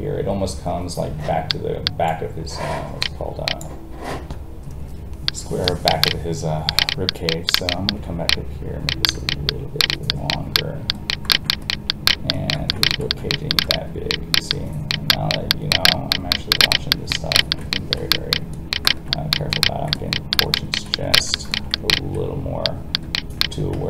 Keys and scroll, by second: 23.7 ctrl+z.